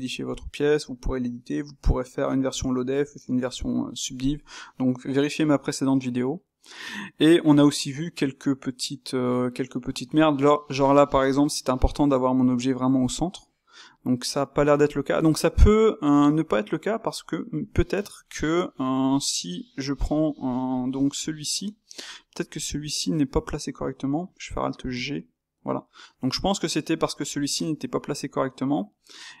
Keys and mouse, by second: 13.8 click, 15.5-18.1 middle drag, 19.1 shift+q, 20.0-20.4 drag, 20.4-21.2 ctrl+middle drag, 21.2 click, 21.7-24.9 middle drag, 24.9 alt+g, 25.8-27.5 middle drag, 27.5 Tab, 28.1-29.4 middle drag.